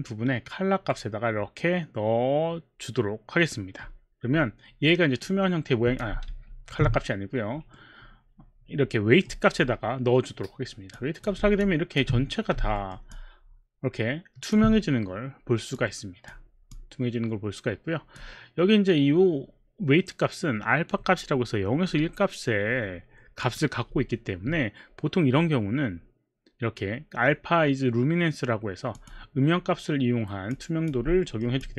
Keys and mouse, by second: 1.0 middle click, 5.2 click, 6.3 ctrl+z, 7.8 middle click, 10.9 click, 12.8 alt+middle click, 13.1 alt+click, 15.7 click, 16.7 click, 23.4 click, 29.0 click, 31.4 alt+middle click, 31.6 alt+click.